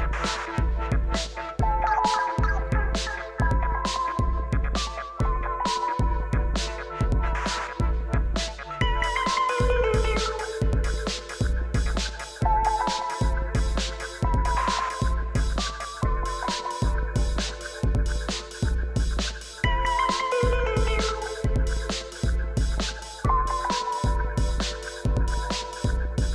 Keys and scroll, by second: 14.5 shift+a, 15.3 g, 21.5 ctrl+t.